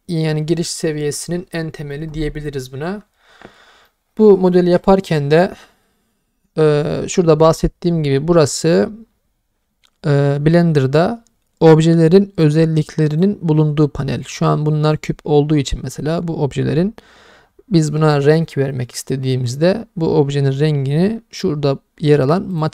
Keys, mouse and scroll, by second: 3.9-4.5 middle drag, 4.9-5.6 middle drag, 12.4 click, 14.3 middle drag, 14.9 click, 18.4-19.1 middle drag, 22.6-22.7 drag.